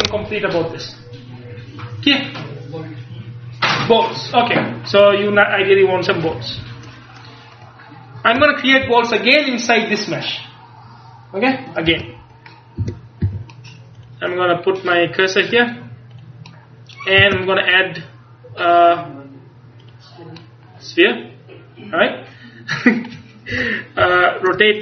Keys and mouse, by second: 7.6-9.9 middle drag, 12.0 Tab, 12.9 a, 13.3 a, 14.1-15.8 middle drag, 17.3 space, 23.6 KP_1, 24.1 KP_3.